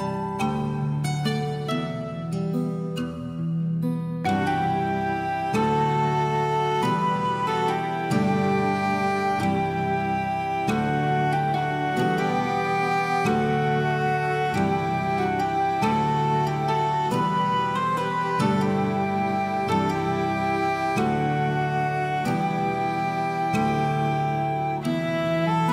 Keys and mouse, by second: 0.2 click, 1.1 click, 1.5 click, 1.9 ctrl+a, 3.1 Tab, 3.6 Tab, 4.1 shift+middle click, 4.8 click, 5.1 click, 5.6 click, 6.0 s, 7.9 right click, 8.4 click, 8.8 shift+middle click, 9.3 click, 9.8 s, 11.7 click, 12.0 click, 12.2 click, 14.5 alt+middle click, 14.7 shift+middle click, 15.1 click, 15.3 middle click, 15.5 alt+middle click, 15.7 alt+middle click, 15.8 alt+middle click, 16.0 shift+middle click, 16.2 click, 16.6 shift+middle click, 17.4 click, 17.8 ctrl+a, 18.3 click, 18.9 Tab, 19.2 shift+middle click, 21.0 alt+z, 21.7 shift+click, 22.5-23.7 drag, 24.2 shift+click, 24.9 shift+click, 25.2 alt+middle click, 25.5 shift+middle click.